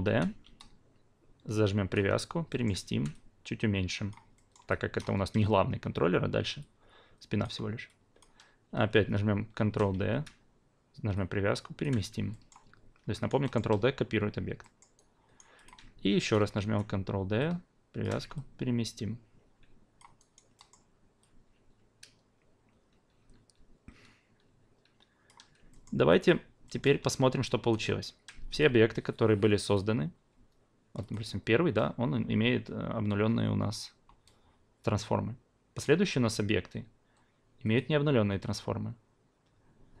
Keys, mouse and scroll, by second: 0.0 w, 0.4 v, 0.6-1.9 drag, 2.5 alt+middle drag, 2.9 r, 3.1-4.2 drag, 4.3 alt+middle drag, 4.9 alt+click, 6.6 alt+click, 8.0 alt+click, 9.5-10.9 typing, 11.1-11.8 drag, 12.3 alt+middle drag, 13.1 alt+right drag, 13.4 alt+middle drag, 14.6 alt+middle drag, 14.9-15.4 alt+right drag, 15.6 alt+click, 16.2 ctrl+d, 16.5 w, 17.0 v, 17.4 click, 18.3-20.2 alt+drag, 20.3 alt+right drag, 20.7 alt+middle click, 21.4-25.2 alt+drag, 25.7 alt+middle click, 26.1 alt+click, 26.6 alt+middle click, 27.7 alt+right drag, 28.5 click, 29.6 click, 31.0 click, 35.7 click, 37.7-40.0 drag.